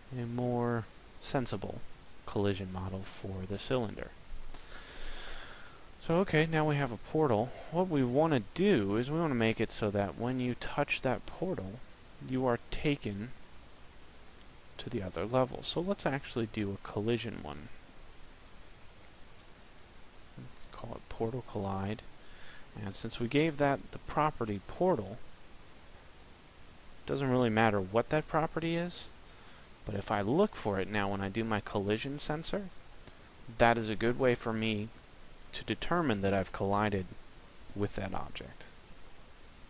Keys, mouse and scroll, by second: 6.7 right click, 11.2 click, 24.7 right click, 29.2 right click.